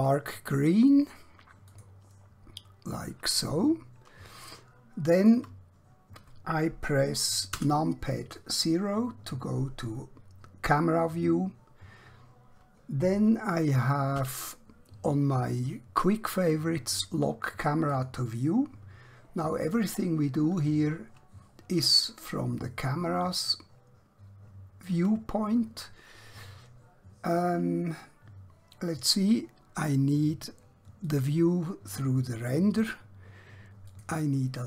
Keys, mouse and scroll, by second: 3.7 scroll down 1, 4.5 middle click, 7.6 KP_0, 14.1 q, 17.9 click, 19.3-21.1 scroll up 1, 21.1-21.6 scroll down 1, 21.6-22.1 scroll up 1, 22.3 shift+middle click, 31.0 click, 33.8 click.